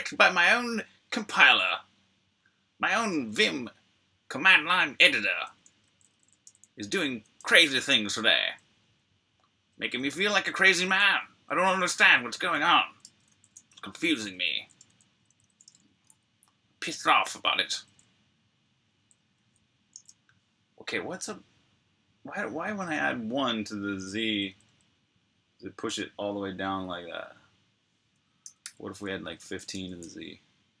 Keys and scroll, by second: 5.3-10.1 typing, 12.3-14.3 typing, 18.7 l, 19.8 super+q, 24.1-24.5 typing, 28.0-28.9 typing, 29.5 super+r, 29.9-30.7 typing, 30.2 super+h.